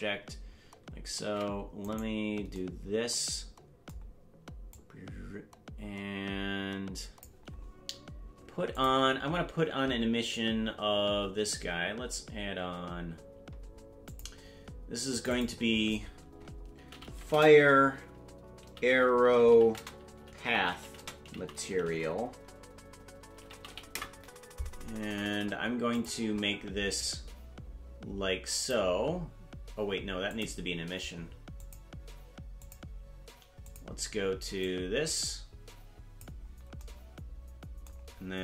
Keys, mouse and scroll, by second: 1.2 ctrl+Tab, 1.9 right click, 4.7-7.2 drag, 8.7 click, 14.0 click, 15.1 click, 15.3-24.7 drag, 25.9 click, 30.2 click, 31.5-32.7 drag, 33.6 click.